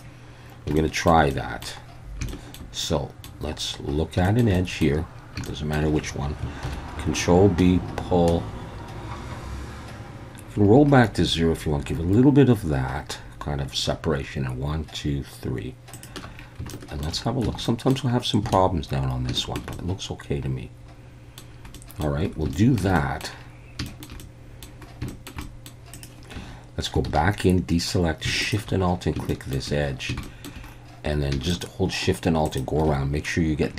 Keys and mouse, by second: 0.8 shift+middle click, 1.3 middle click, 2.3 shift+middle click, 2.8 middle click, 4.2 shift+middle click, 4.5 middle click, 5.5 shift+click, 6.6 ctrl+b, 15.9 shift+click, 16.7 shift+middle click, 17.5 Tab, 17.6 middle drag, 18.5 alt+a, 19.4 shift+middle click, 19.8-21.4 middle drag, 21.8 middle drag, 22.5 shift+middle drag, 23.0 middle click, 23.9 shift+middle click, 24.2-24.6 middle drag, 25.1 shift+middle click, 25.5 middle drag, 25.9 click, 26.4 Tab, 27.1 alt+a, 28.4 alt+shift+click, 29.3 shift+middle click, 30.2 shift+middle click, 31.6 alt+shift+click, 32.5 alt+shift+click.